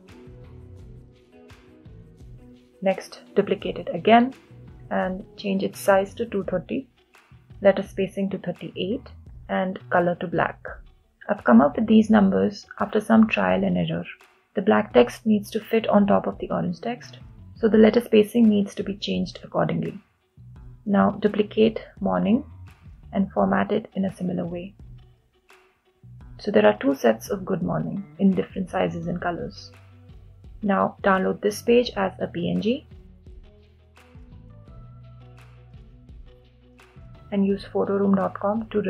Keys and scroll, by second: 17.9 Return.